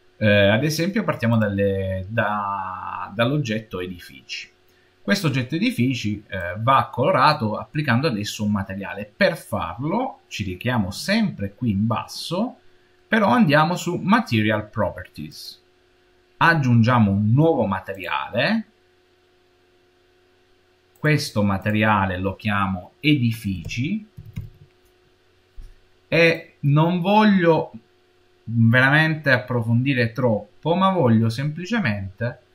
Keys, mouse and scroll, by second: 1.2 click, 6.2 click, 15.1 click, 17.8 click, 20.8 click, 21.5 click, 30.6-32.5 scroll down 1.